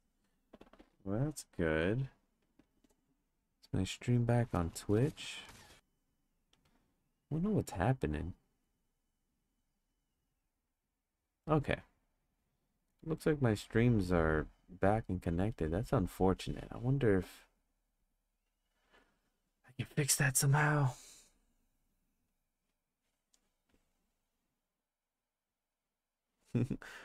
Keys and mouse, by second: 20.8 click, 21.8 click, 22.4 click.